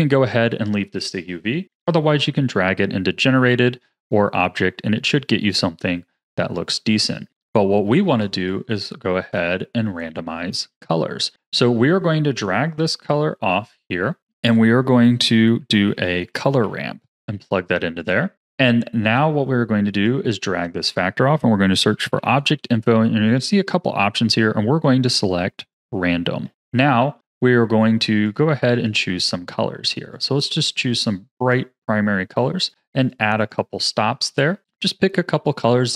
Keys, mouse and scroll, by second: 0.1-0.6 middle drag, 0.6-1.3 scroll up 9, 1.3-4.2 middle drag, 7.1-8.1 scroll down 7, 7.3-7.7 middle drag, 8.1 click, 10.0-13.5 middle drag, 13.5-15.5 drag, 18.6-20.0 middle drag, 20.0 click, 26.5 middle drag, 26.8-27.1 scroll up 1, 27.1-28.2 middle drag, 28.2 click, 32.5-34.7 drag.